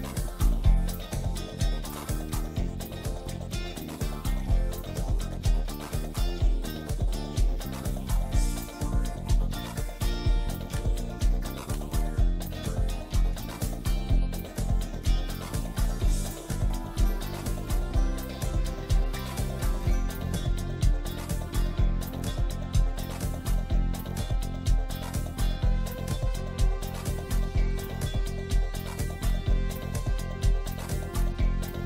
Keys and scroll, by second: 6.3 Escape, 12.1 F2, 17.3 ctrl+Page_Down, 18.5 shift+Page_Down, 18.7 ctrl+Page_Up, 19.5 F3, 22.2 shift+Page_Up, 22.9 shift+F2, 23.2 F3, 25.3 ctrl+g, 26.0 c, 26.2 Escape, 29.9 F4.